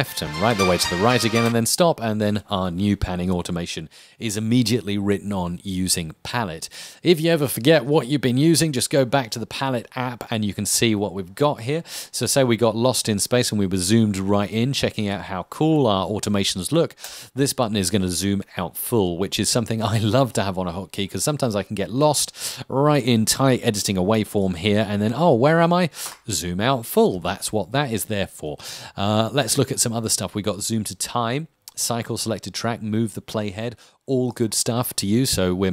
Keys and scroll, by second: 1.6 space.